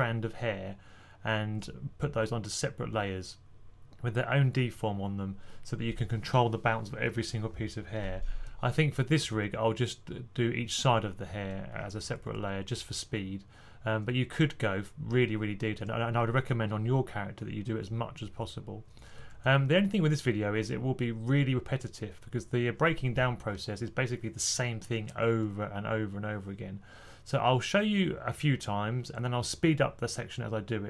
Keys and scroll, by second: 8.9-9.7 typing, 12.2 typing, 19.7 typing.